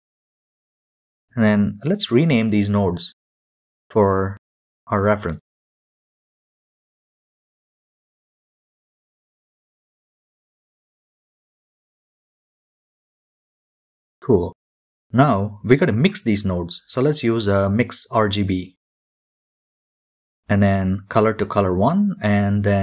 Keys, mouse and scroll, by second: 0.0-1.6 drag, 1.6-5.9 right drag, 5.9 click, 6.1-10.3 right drag, 8.7 BackSpace, 8.9 BackSpace, 10.3-14.6 drag, 14.6 shift+middle click, 15.1 shift+a, 18.6-22.8 drag.